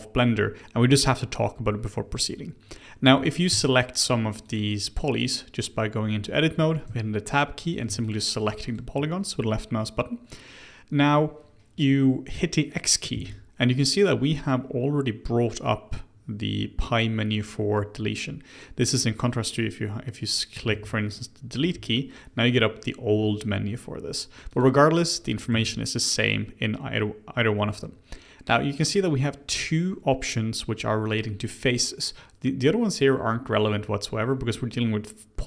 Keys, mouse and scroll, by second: 3.0 3, 3.2 click, 3.7 shift+click, 4.0 shift+click, 4.4 shift+click, 6.5 Tab, 6.8 Tab, 7.6 click, 8.0 shift+click, 8.3 shift+click, 8.6 shift+click, 13.1 x, 20.7 ctrl+z, 21.6 Delete, 25.5 x.